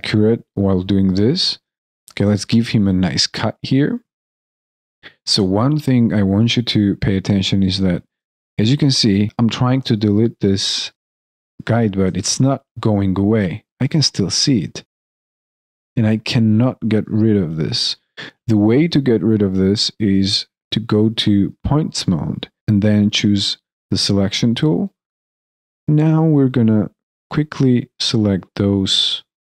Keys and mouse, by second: 1.7 alt+click, 4.6 alt+click, 8.2 alt+right click, 10.6 alt+right click, 11.6 alt+click, 12.7 alt+right click, 14.7 alt+click, 16.9 alt+right click, 18.2 alt+middle click, 18.5 alt+right click, 19.5 alt+middle click, 20.0 alt+click, 24.7 alt+right click, 27.2 shift+click, 27.8 shift+middle click, 28.0 shift+click, 28.1 shift+click, 28.1 alt+middle click, 28.2 alt+click, 28.3 shift+click, 28.7 alt+click, 28.7 alt+right click, 28.8 alt+middle click, 28.8 alt+click, 28.9 alt+middle click, 29.0 alt+click, 29.0 alt+right click, 29.1 shift+click, 29.3 alt+middle click, 29.3 alt+click.